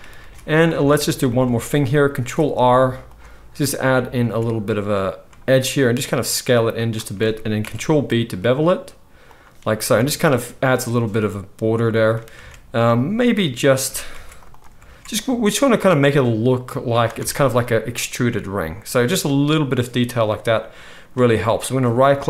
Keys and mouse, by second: 0.1 alt+a, 0.7 Tab, 2.1 ctrl+r, 4.2 s, 7.6 ctrl+b, 9.9 Tab, 9.9-20.1 middle drag, 12.4 Tab, 14.1 ctrl+r, 14.8 alt+s, 17.1 Tab, 20.2-21.7 middle drag, 21.7-22.2 right drag.